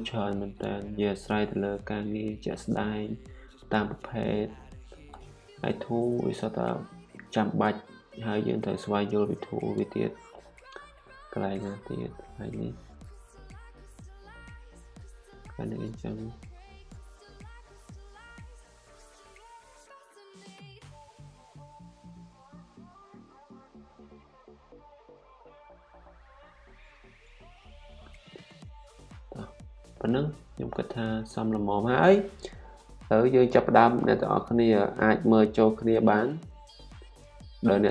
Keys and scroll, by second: 1.2-5.0 typing, 27.6-31.2 typing.